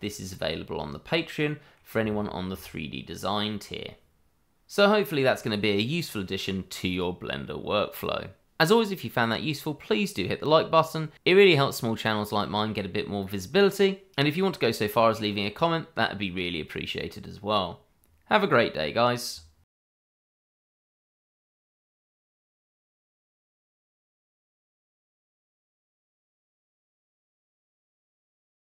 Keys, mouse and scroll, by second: 2.1 shift+middle click, 14.9 middle click.